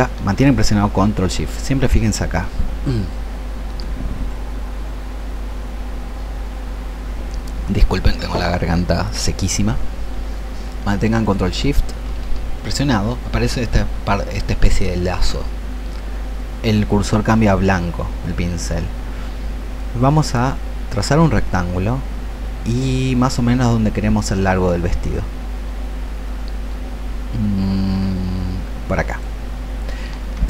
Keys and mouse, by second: 11.3 click, 19.8-29.5 ctrl+shift+drag.